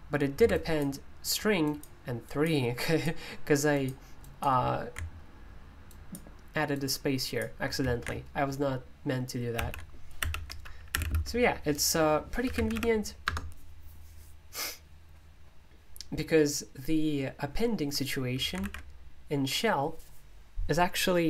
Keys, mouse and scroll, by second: 5.9-12.4 drag, 12.3-13.2 typing, 18.6 alt+super+i.